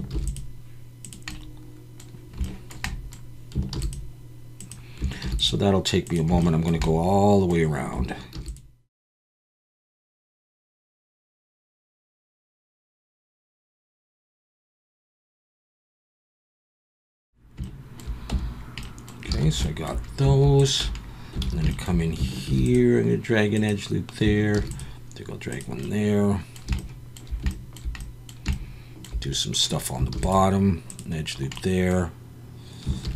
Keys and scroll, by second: 0.1 ctrl+r, 3.7 ctrl+r, 5.2 ctrl+r, 9.2 ctrl+r, 10.4 ctrl+r, 10.8 ctrl+r, 11.9 ctrl+r, 13.2 ctrl+r, 13.6 ctrl+r, 14.6 ctrl+r, 14.9 ctrl+r, 15.9 ctrl+r, 16.3 ctrl+r, 18.3 Tab, 19.3 alt+a, 20.8 Tab, 21.4 alt+a, 22.4 ctrl+r, 24.5 ctrl+r, 30.1 ctrl+r, 33.0 ctrl+r.